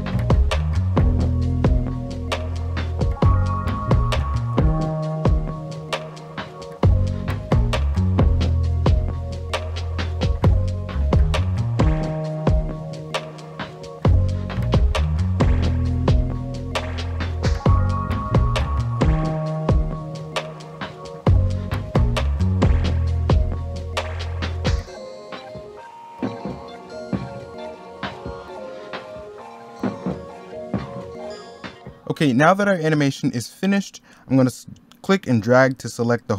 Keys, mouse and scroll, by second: 1.2 middle click, 2.1 middle click, 5.1 scroll down 1, 5.2 u, 5.5 z, 5.7 x, 6.1 scroll up 1, 9.6 middle click, 10.1 middle click, 10.8 middle click, 12.5 scroll down 1, 12.6 middle click, 12.7 scroll up 1, 12.9 middle click, 13.1 u, 13.2 i, 15.3 i, 15.4 u, 15.6 i, 17.2 middle click, 17.8 middle click, 18.7-20.7 typing, 19.2 middle click, 20.1 middle click, 20.6 middle click, 21.9 middle click, 22.6 u, 23.2 middle click, 24.3 middle click, 24.3 u, 25.7 i, 26.4 u, 27.1 middle click, 28.4-30.4 typing, 29.1 scroll down 1, 29.2 middle click, 29.7 middle click, 29.8 scroll up 1, 30.1 ctrl+z, 30.8 scroll down 1, 30.9 middle click.